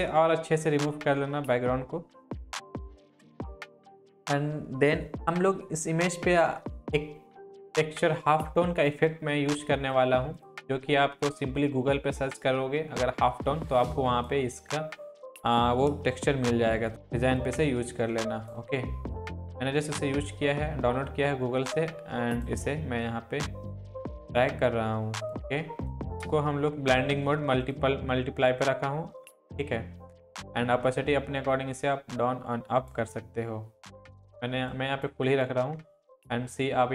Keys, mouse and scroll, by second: 2.5 shift+click, 7.6-14.5 drag, 16.3 ctrl+t, 16.9-18.7 drag, 27.6 click, 27.6-33.1 drag, 36.1-36.9 alt+scroll up 2.